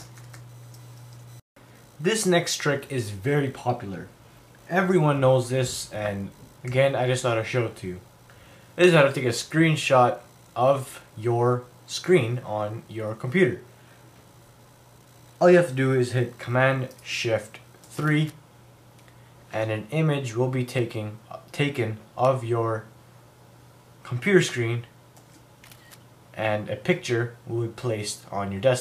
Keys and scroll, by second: 0.0 super+w.